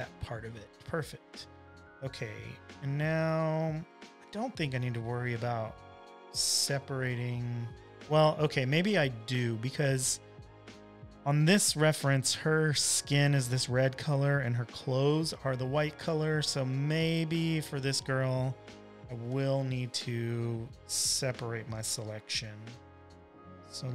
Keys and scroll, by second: 1.1 super+j, 2.8 space, 3.3 space, 3.4 space, 7.1 super+-, 8.6 space, 9.2 space, 10.0 space, 20.4 v, 21.7 w.